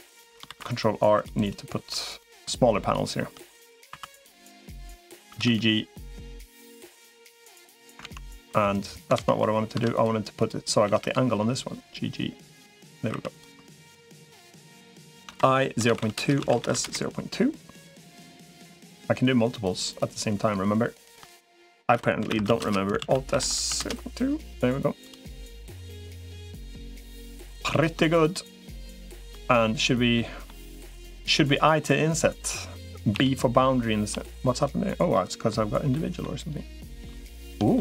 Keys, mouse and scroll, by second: 0.3 ctrl+r, 1.7 3, 3.9 2, 5.1 g, 6.5 click, 6.5 3, 7.9 ctrl+z, 8.9 ctrl+z, 9.3 ctrl+z, 9.7 click, 10.7 g, 13.1 click, 13.1 3, 15.1 i, 16.3 alt+s, 19.3 shift+click, 19.7 shift+click, 21.7 i, 22.9 alt+s, 25.1 middle click, 26.1 click, 26.4 middle click, 27.1 3, 27.9 shift+click, 29.9 middle click, 30.9 i, 34.9 middle click, 35.7 middle click, 36.9 shift+click, 37.5 middle click.